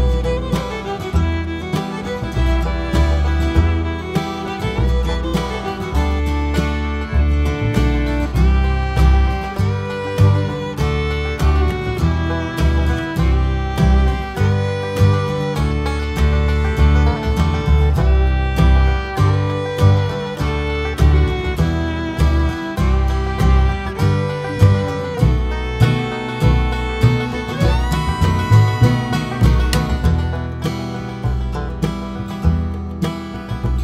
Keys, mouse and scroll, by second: 0.3-2.3 drag, 2.9-4.0 drag, 4.3 `, 4.6 click, 6.2 click, 6.8 `, 8.0 click, 8.8 `, 9.3 click, 9.5 `, 10.9 KP_Divide, 11.2 `, 11.5 scroll up 1, 11.7 `, 12.7 KP_Decimal, 17.7 click, 19.1 KP_Divide, 19.4 `, 22.0 click, 22.1 ctrl+s, 22.8-29.1 drag, 25.9-26.2 scroll down 2, 26.2-26.6 scroll up 2, 26.6 `, 27.7 KP_Divide, 28.1 scroll down 2, 28.3-29.1 scroll up 2, 31.5 shift+click, 32.5 alt+a, 33.2 scroll down 2, 33.4 a, 33.7 click.